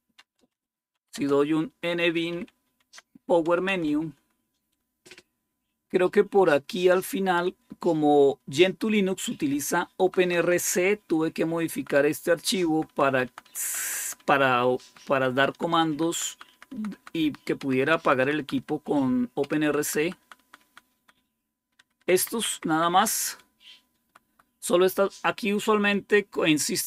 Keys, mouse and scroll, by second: 0.0-2.7 typing, 2.7 Tab, 3.5 Return, 5.5 Down, 6.2 Down, 9.9 Down, 10.1 Down, 10.3 Down, 10.7-11.7 Down, 12.4 Down, 12.6 Down, 12.8 Down, 13.5 Down, 13.7 Down, 14.1 Down, 14.7 Down, 15.2 Down, 15.4 Down, 16.0 Down, 16.4 Down, 16.6 Down, 16.8 Down, 17.5 Down, 17.7 Down, 17.9 Down, 18.3 Down, 19.3 Down, 19.7 Down, 19.9 Down, 20.1 Down, 20.3 Down, 20.5 Down, 21.6 Down, 21.6 Up, 21.8 Up, 22.0 Up, 22.2 Up, 22.4 Up, 22.8 Up, 23.2 Right, 23.9 Right, 24.0 Right, 24.2 Right.